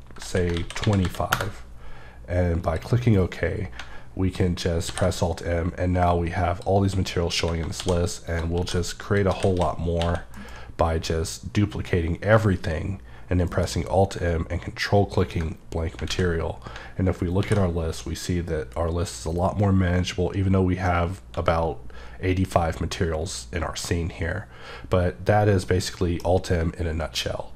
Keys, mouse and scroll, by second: 0.5 ctrl+a, 0.8 ctrl+KP_2, 1.3 KP_Enter, 2.6 click, 4.9 alt+m, 6.0 click, 7.3 a, 8.3 click, 8.5-10.3 typing, 9.0 click, 13.5 alt+m, 15.2 click, 16.1 a, 17.6 m, 25.7 middle click.